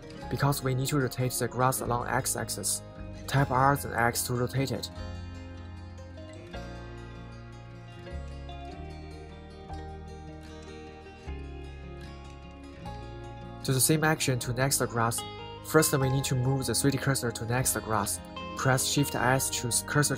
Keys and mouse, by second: 5.3 r, 5.6 x, 9.7 click, 12.4-14.2 middle drag, 14.6 middle click, 15.3-16.6 middle drag, 17.9 shift+s.